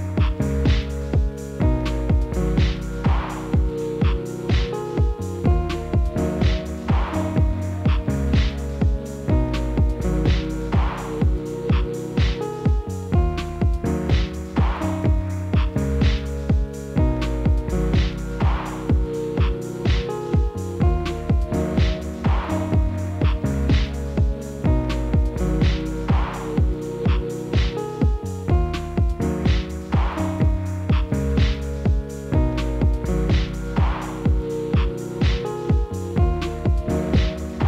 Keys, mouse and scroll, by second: 0.3 KP_7, 0.7 scroll down 2, 1.9 g, 5.0 KP_Divide, 5.5-6.2 middle drag, 6.2 KP_Divide, 6.7 click, 6.8-7.4 middle drag, 7.4-8.0 scroll up 7, 8.0-8.6 shift+middle drag, 8.6 click, 9.4 drag, 9.9-10.3 middle drag, 10.3 scroll up 3, 10.6-11.0 shift+middle drag, 11.0 click, 11.3 scroll down 1, 11.6 click, 11.9 drag, 12.2 shift+click, 12.5 shift+drag, 13.0 shift+click, 13.5-14.7 middle drag, 14.7 shift+click, 15.2 shift+click, 15.6 shift+click, 16.0 shift+click, 16.7 shift+click, 17.0 scroll down 2, 17.2-17.8 middle drag, 17.8-18.7 scroll down 1, 18.7 KP_Divide, 19.3-20.7 middle drag, 21.7 KP_7, 22.2 scroll down 4, 22.8 KP_Divide, 23.3 KP_7, 24.0 shift+z, 24.8 shift+d, 26.8 shift+d, 28.8 shift+d, 30.0 shift+d, 31.8 shift+d, 32.9 shift+d, 35.6 KP_Divide, 36.2-36.7 scroll down 1, 36.7 shift+z, 37.3 KP_Divide.